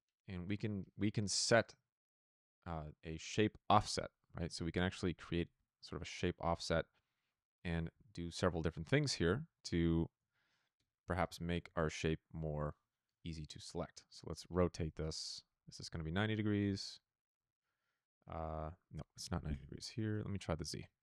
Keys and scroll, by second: 0.0-0.1 typing, 7.8 p, 10.7 Return, 11.5 n, 14.9 Return, 17.3 n, 19.7 KP_0, 20.0 Return, 20.9 Page_Up.